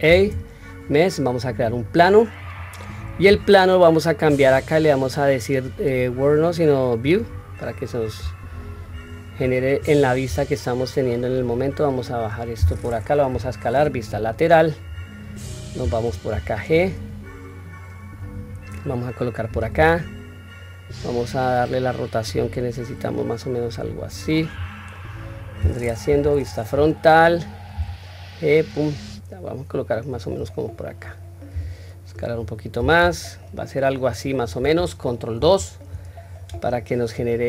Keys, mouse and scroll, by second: 4.0 click, 5.5-7.0 drag, 8.2-9.1 scroll down 4, 10.0-12.1 scroll down 2, 10.0 s, 13.0 KP_3, 14.6 scroll up 1, 16.0-17.8 scroll up 3, 16.0 g, 24.3-25.4 scroll up 2, 24.7 middle click, 25.8 KP_1, 26.5-27.2 scroll down 1, 27.3 scroll down 1, 27.4 g, 30.5-31.3 scroll up 1, 31.3 s, 32.7 g, 35.1 ctrl+2, 37.2-37.4 scroll up 1.